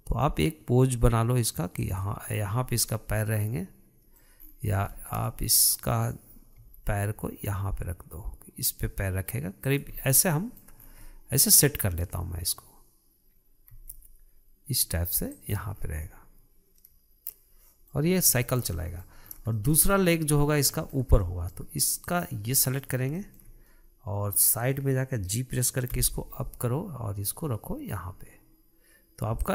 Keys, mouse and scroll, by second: 2.7-3.3 scroll down 5, 3.3-4.9 middle drag, 4.9-5.4 scroll up 7, 5.4-7.1 shift+middle drag, 7.1 g, 10.4 scroll down 3, 10.6-11.3 middle drag, 11.3 scroll up 2, 11.5-14.2 middle drag, 14.2 g, 16.2-16.5 scroll down 1, 16.5-18.6 middle drag, 18.6-18.9 scroll down 1, 18.9-19.7 shift+middle drag, 19.7 scroll up 2, 20.0-22.5 shift+middle drag, 22.5 click, 23.0-26.4 middle drag, 26.4 g.